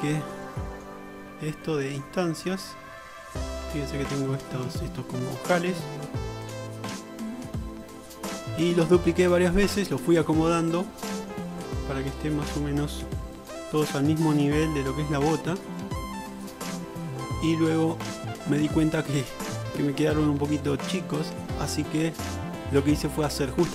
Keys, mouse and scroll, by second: 5.7-7.0 middle drag, 7.4-23.7 middle drag.